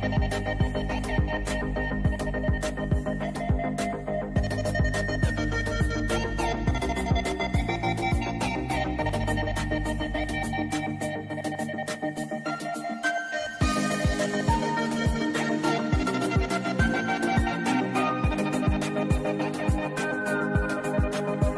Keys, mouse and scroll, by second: 1.3-2.1 scroll up 1, 2.1-4.3 drag, 4.3-5.8 drag, 9.2 right click, 10.7 click, 12.4 right click, 13.1 click, 14.6 click, 16.1 ctrl+2, 16.3 click, 16.7-17.2 scroll up 1, 17.3 right click, 17.8 click, 18.2-18.9 scroll down 1, 18.9-21.5 drag.